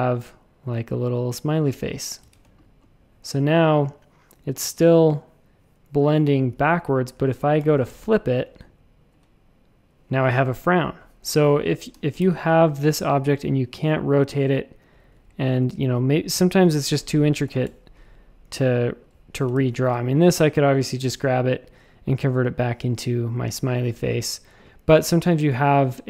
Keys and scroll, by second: 2.2 shift+super+a, 2.4 space, 6.4 a, 7.5 r, 11.9 super+z, 12.2 shift+super+a, 15.1 a, 17.4 r, 19.5 shift+super+a.